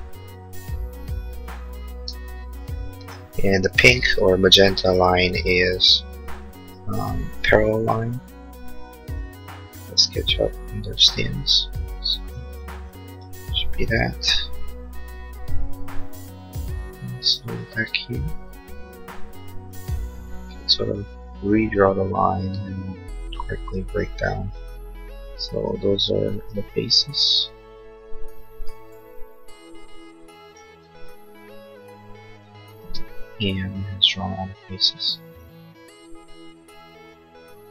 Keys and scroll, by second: 2.0 e, 3.8 l, 11.3 e, 19.9 Escape, 25.5 space, 28.7 l, 32.7 space.